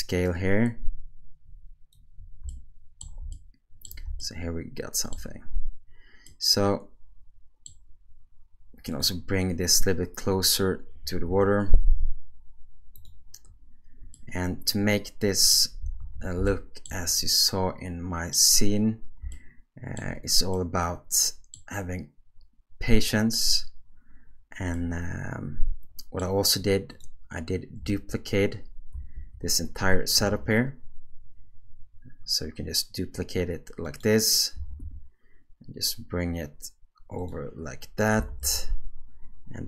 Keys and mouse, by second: 2.5-3.2 shift+middle drag, 3.3-3.9 ctrl+middle drag, 4.2-5.1 shift+middle drag, 6.3-7.7 middle drag, 8.9 click, 10.3 click, 11.3 g, 14.1-15.5 middle drag, 16.0 alt+a, 16.5-16.9 shift+middle drag, 17.2-18.3 middle drag, 19.3-20.0 shift+middle drag, 20.5-21.6 middle drag, 24.7-26.2 middle drag, 26.9 click, 29.0 shift+d, 32.3-37.6 right drag, 34.5 g, 38.2 s.